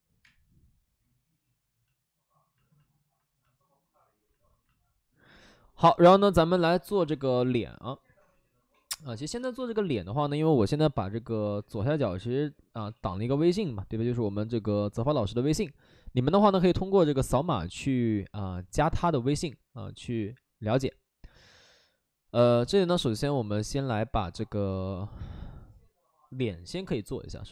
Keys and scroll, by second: 0.1 space, 6.8 x, 11.7 x, 12.8 ctrl+z.